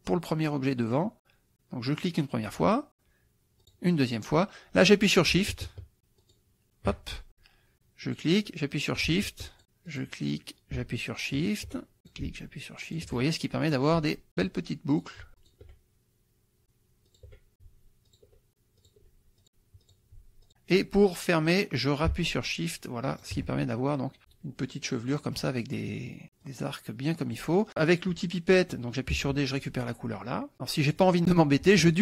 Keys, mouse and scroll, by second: 2.0 click, 3.7 click, 6.2 shift+click, 8.1 click, 9.5 shift+click, 9.9 click, 11.4 shift+click, 12.0 shift+click, 12.9 shift+click, 13.7 click, 14.3 shift+click, 15.0 click, 15.4 shift+click, 17.1 shift+click, 17.5 click, 18.1 shift+click, 18.8 shift+click, 19.4 shift+click, 19.8 shift+click, 20.4 shift+click, 23.1 shift+click, 25.2 click, 26.4-27.6 drag, 29.2 d, 29.6 click, 30.5 click.